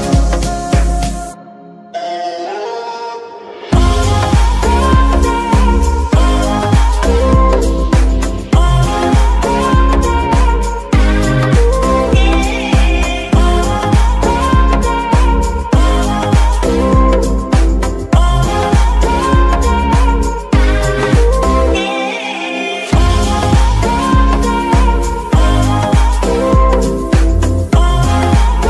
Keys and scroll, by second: 0.3 Escape, 4.3 g, 4.8 Escape, 6.4 d, 6.5 e, 10.6 g, 11.4 Escape, 12.9 g, 13.3 Escape, 14.2 d, 14.3 e, 18.0 g, 18.6 Escape, 22.6 g, 23.6 Escape, 24.2 g, 26.6 y, 27.8 Escape.